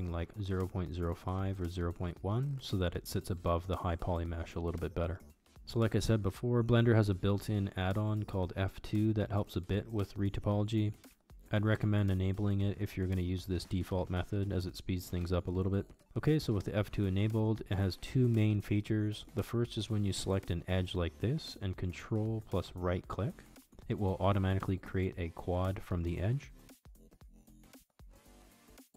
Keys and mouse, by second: 3.4 KP_1, 4.0 shift+middle click, 5.5-7.2 drag, 15.5 shift+middle click, 15.9 Tab, 19.1 alt+z, 22.7 ctrl+right click, 23.9 ctrl+right click, 26.1-28.6 middle drag.